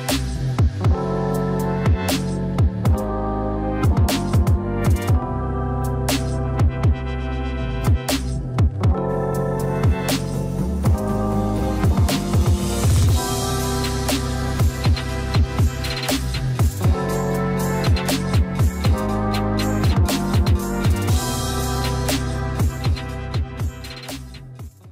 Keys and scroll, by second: 0.4 shift+e, 17.8 ctrl+z, 18.7 ctrl+z, 24.1 ctrl+g.